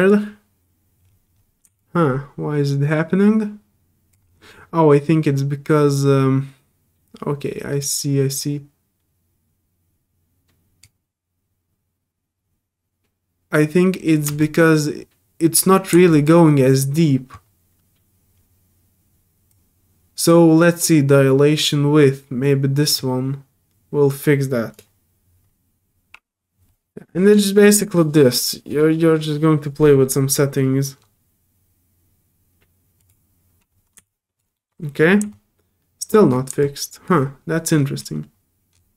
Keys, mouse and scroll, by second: 0.0 alt+click, 1.4 middle click, 1.8-4.1 drag, 5.1-7.8 alt+drag, 8.4-10.8 drag, 14.1 scroll up 1, 14.4-15.5 drag, 16.1 alt+click, 19.5-22.9 drag, 24.7 click, 30.9 middle click, 30.9 scroll up 2, 33.0 click, 34.0 alt+click, 34.5 alt+middle click, 34.9 alt+scroll up 2, 35.3 alt+click, 36.3 alt+middle click, 36.6 alt+click, 37.7 scroll up 3, 38.7 scroll down 2.